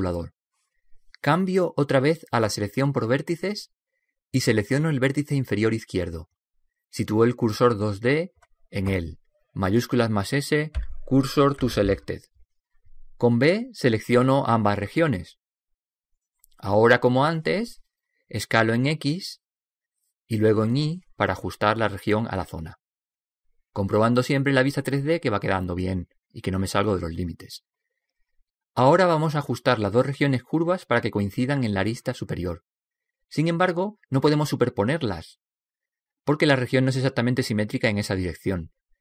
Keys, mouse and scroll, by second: 4.5-6.2 shift+drag, 6.2-8.8 right drag, 11.9 shift+s, 14.2 b, 18.2 s, 22.5 s, 26.3-28.4 middle drag.